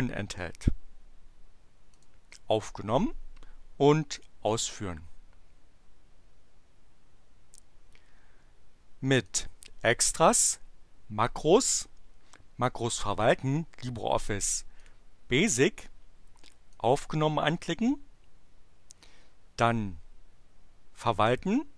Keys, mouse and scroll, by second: 1.9 click, 4.2 click, 9.3 click, 14.6 click, 16.7 click.